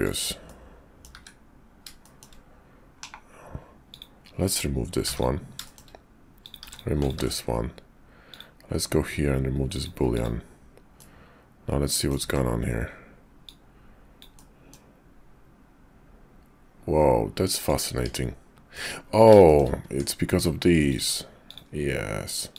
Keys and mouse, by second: 0.4 click, 2.0 shift+click, 2.9 /, 4.9 x, 5.6 shift+click, 6.4 click, 6.6 x, 7.2 ctrl+`, 10.9-12.1 middle drag, 12.2 `, 13.3-17.7 drag, 17.9 Tab, 18.7 middle click, 19.5 shift+middle click, 19.9 Tab, 20.9 alt+click, 21.3 alt+shift+click, 22.5 alt+shift+click.